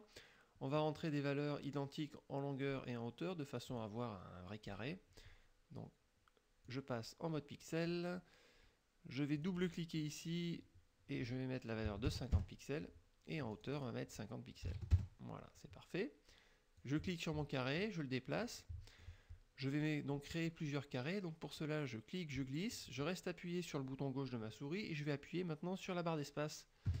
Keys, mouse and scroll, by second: 3.7 click, 4.7 click, 6.7-8.1 drag, 9.5 click, 11.9 KP_5, 12.2 KP_0, 12.4 KP_Enter, 13.6 click, 14.7 KP_5, 15.0 KP_Enter, 16.8-18.7 drag, 18.7 middle click, 21.6-27.0 drag.